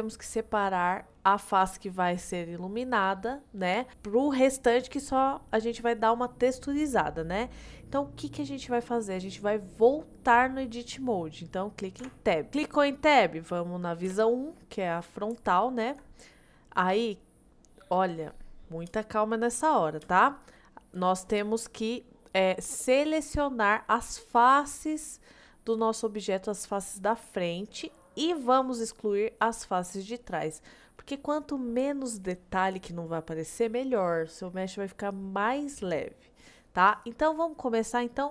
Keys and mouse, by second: 8.1-8.5 middle drag, 12.1 Tab, 12.7 middle click, 14.1 KP_1, 15.6 shift+middle click, 18.9 space, 20.1 space, 21.0 click, 28.0 middle click.